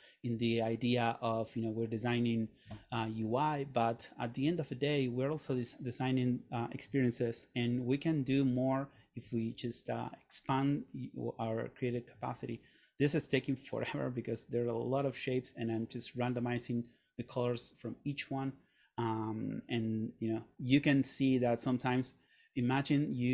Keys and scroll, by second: 7.5 super+..